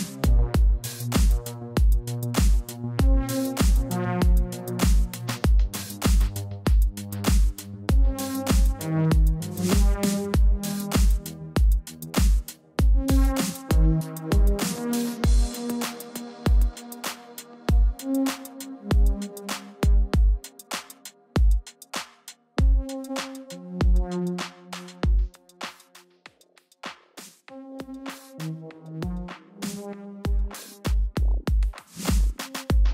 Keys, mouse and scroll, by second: 0.1 Return, 0.5 click, 2.2 ctrl+t, 2.6 click, 3.8 Return, 5.1 click, 7.1-9.6 typing, 9.3 click, 10.8 right click, 11.1 click, 11.4 ctrl+t, 12.8 click, 13.2 click, 13.9 Return, 14.2 click, 17.1 click, 18.6 z, 18.8 click, 20.2 ctrl+shift+], 20.4 typing, 21.3 ctrl+t, 22.1 click, 24.3 Return, 25.0 click, 26.8 ctrl+t, 27.1 right click, 27.4 click, 28.4 right click, 28.7 click, 29.1 ctrl+z, 29.3 right click, 29.5 click, 31.8 Return, 32.6 click.